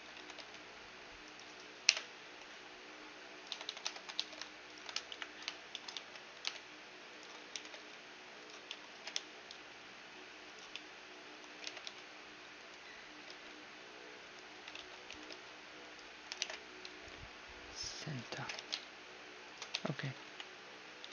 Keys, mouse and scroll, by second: 0.2 e, 1.8 ,, 2.2 s, 3.5-6.4 typing, 4.0 ctrl+n, 4.7-5.7 right drag, 6.4 right click, 7.1 middle click, 7.7 e, 8.5 z, 8.7-10.5 middle drag, 9.0 g, 10.8-12.7 middle drag, 11.7 g, 13.3 s, 14.8 ctrl+z, 15.1 e, 16.4 alt+m, 18.5 g, 19.7 Tab, 19.7-21.1 middle drag, 20.3 a, 20.3 KP_1, 21.0 z.